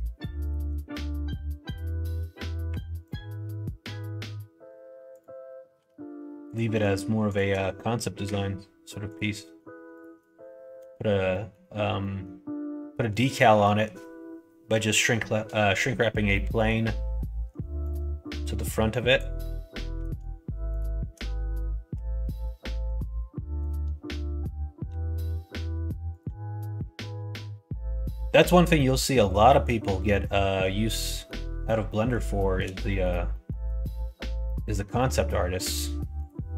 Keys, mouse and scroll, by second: 2.6 1, 3.8 g, 5.7 2, 6.4 click, 7.3 click, 8.2 f, 9.0 click, 9.9 click, 10.8 f, 11.2 middle click, 11.9 middle click, 13.0 middle click, 16.3 middle click, 17.8 click, 19.0 click, 19.4 middle click, 20.7 shift+click, 21.9 f, 22.3 middle click, 23.6 click, 24.8 r, 26.7-28.2 middle drag, 29.1 middle click, 30.0-31.2 middle drag, 31.9 middle click, 32.3 shift+middle click, 32.8 middle click, 33.2 middle click, 33.8 shift+middle click, 34.4 middle click, 34.9 middle click, 36.2 click.